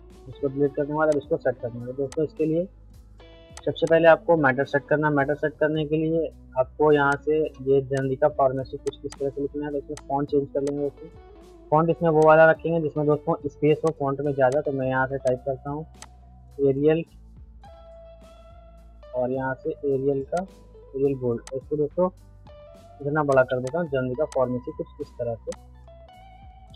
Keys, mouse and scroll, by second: 4.5 middle click, 5.1 shift+F2, 6.1 F3, 6.8 middle click, 7.1 click, 8.9 shift+c, 9.1 click, 13.3 c, 13.9 click, 16.3-16.7 typing, 19.1 typing, 20.3 click, 21.5-23.3 shift+drag, 23.5 c, 23.7 click, 25.5-26.7 shift+drag.